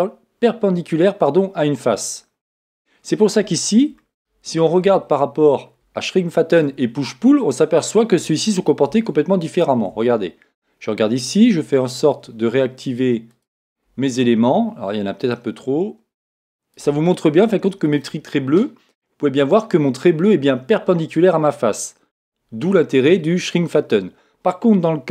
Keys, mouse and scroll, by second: 2.9-4.0 scroll down 1, 4.0-5.5 scroll down 1, 5.5 middle click, 5.7-6.1 scroll up 1, 6.1-9.1 middle drag, 8.9 Tab, 9.3 middle click, 9.5-11.3 right drag, 9.9 Tab, 13.3-15.2 drag, 15.3-17.2 drag.